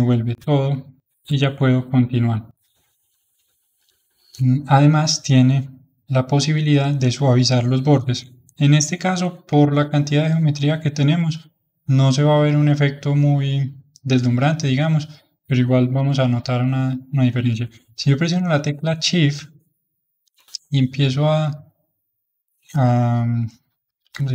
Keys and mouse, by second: 7.2-18.5 middle drag, 19.6-24.3 shift+drag.